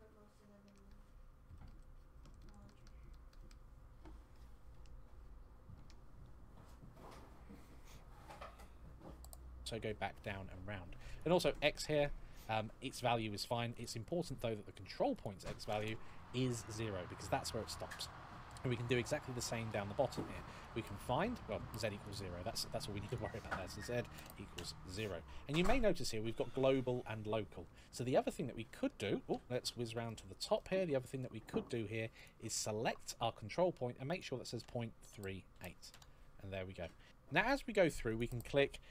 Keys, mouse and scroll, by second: 11.0 click, 13.5 click, 15.5 KP_0, 15.6 Return, 17.8-18.2 scroll down 1, 18.9 shift+middle click, 19.0-19.5 scroll up 2, 19.5 shift+middle click, 20.4 click, 20.4 click, 22.9 click, 24.0 KP_0, 24.3 Return, 27.5-28.0 scroll down 1, 28.0 middle click, 29.1 KP_1, 29.8 shift+middle click, 31.2-32.0 scroll up 1, 32.0 click, 32.0 scroll up 1, 33.9 click, 34.9 KP_3, 35.3 KP_8, 35.7 Return, 36.9 right click, 36.9 click, 37.8 click, 38.7 g.